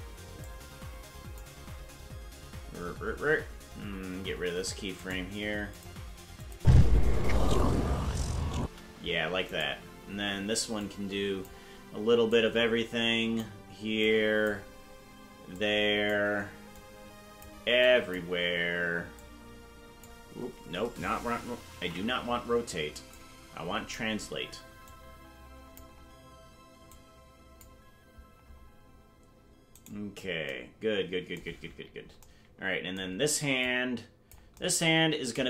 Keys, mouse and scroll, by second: 0.4-1.4 drag, 2.5-3.3 scroll up 16, 5.0 right click, 5.4 Delete, 6.4-7.8 drag, 6.5 space, 8.6 space, 9.6 right click, 10.8 click, 12.3-13.4 drag, 14.0 click, 15.5 click, 16.7 click, 17.8 click, 19.1 click, 22.2 ctrl+z, 23.1 click, 24.9 click, 26.8 click, 29.9 right click, 31.6 scroll down 4, 33.6 click.